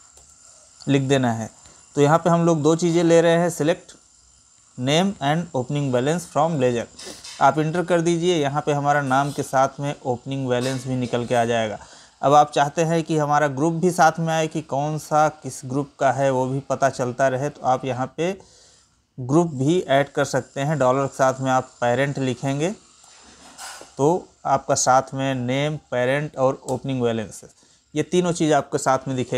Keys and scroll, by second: 9.1 Right, 9.7 Down, 12.7 ctrl+n, 13.2 Up, 14.2 Right, 16.1 Left.